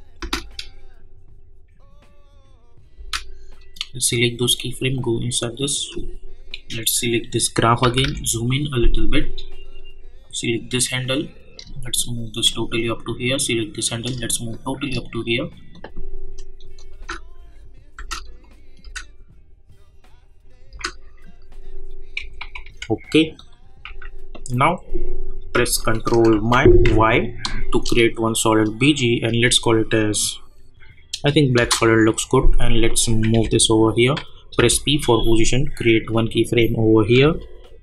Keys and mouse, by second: 0.2 space, 2.9 space, 3.6 click, 7.8 =, 8.0 =, 8.8-12.8 drag, 12.8-15.8 drag, 16.9 space, 17.7 space, 18.4 click, 18.8 space, 21.7 click, 22.2 -, 22.6 -, 22.7 -, 23.3 click, 23.8 u, 24.5 click, 26.3 ctrl+y, 31.6 Return, 32.9 click, 33.3 [, 34.5 p, 36.0 click.